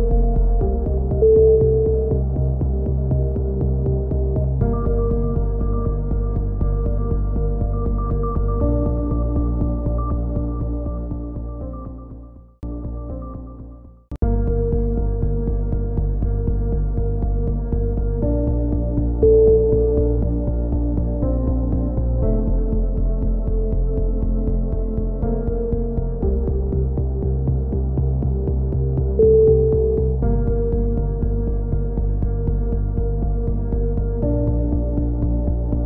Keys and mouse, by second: 1.5 e, 2.6 KP_3, 3.0 click, 3.6 click, 4.1 click, 4.7-5.9 drag, 6.2 click, 6.2 e, 6.5 click, 7.2 KP_1, 7.5 click, 8.4 click, 9.3 e, 9.7-11.0 drag, 12.2 e, 12.6 click, 13.4 click, 14.1 click, 14.6-15.7 drag, 15.5 right click, 15.7 f, 16.0 right click, 16.5 KP_7, 17.0 click, 18.6 right click, 18.6 z, 20.0-21.8 drag, 21.8 a, 21.9 z, 22.2 right click, 22.3 z, 22.9 z, 23.4-24.7 drag, 24.0 KP_3, 24.7 right click, 24.7 z, 24.9 click, 24.9 right click, 26.9 click, 27.2 click, 28.9 ctrl+r, 29.1 click, 30.2 g, 31.3 KP_3, 31.5-33.0 drag, 33.1-34.1 drag, 33.4 g, 34.4 a, 35.0 click.